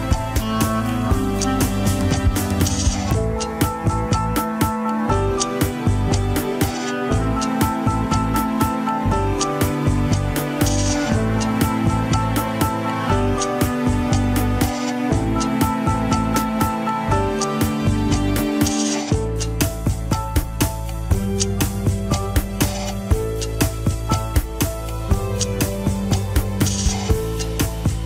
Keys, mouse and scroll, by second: 0.1 middle click, 0.6-2.5 drag, 2.5 middle click, 3.5 click, 4.1 alt+z, 5.2 ctrl+click, 5.3 alt+z, 5.5 middle click, 5.9 alt+z, 6.6 ctrl+click, 6.7 alt+z, 6.9 middle click, 7.4 scroll up 2, 7.8 click, 8.8 middle click, 9.4-10.7 drag, 10.7 scroll down 2, 10.8 middle click, 11.4 click, 11.8 scroll up 1, 12.2 alt+z, 13.2 ctrl+click, 14.1 alt+z, 14.4 click, 15.1 scroll down 1, 15.3 shift+middle click, 15.8 click, 16.6 scroll up 2, 16.9 middle click, 17.6-19.0 drag, 19.0 KP_1, 20.4 ctrl+click, 20.4 scroll down 3, 20.9 r, 22.8 scroll down 1, 23.4 a, 23.8 alt+r, 24.2 alt+g, 25.5 click, 25.8 scroll up 1, 26.1-26.7 shift+middle drag, 26.7 ctrl+Tab, 26.8 drag, 27.6 alt+z.